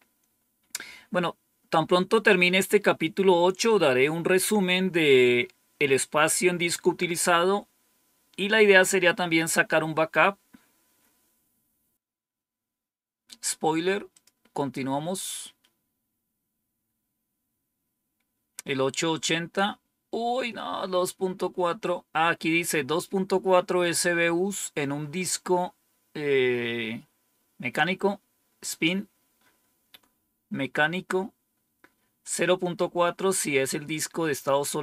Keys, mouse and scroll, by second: 1.8-14.0 scroll up 1, 14.0 click.